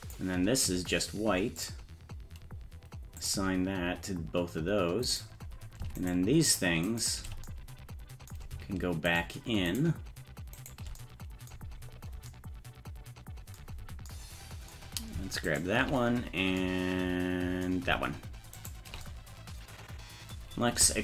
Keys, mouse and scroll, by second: 1.6 click, 3.2 click, 5.1 right click, 6.0 shift+right click, 6.8 shift+right click, 9.1 shift+right click, 9.7 shift+right click, 10.6 shift+right click, 11.9 scroll up 2, 15.5 shift+right click, 18.6 shift+right click.